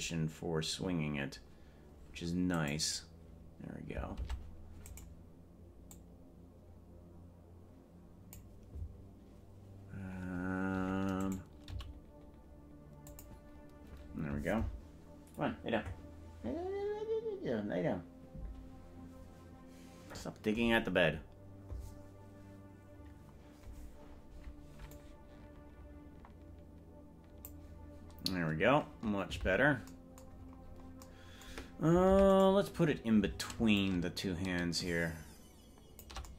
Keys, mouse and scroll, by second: 2.8 right click, 4.4 ctrl+Tab, 5.0 right click, 5.9-8.4 drag, 11.4 right click, 11.8 g, 25.1-27.8 drag, 29.4 KP_Decimal, 30.4-31.0 scroll down 9, 30.8 scroll up 1, 32.2 ctrl+Tab, 32.6 right click, 33.8-36.1 shift+drag.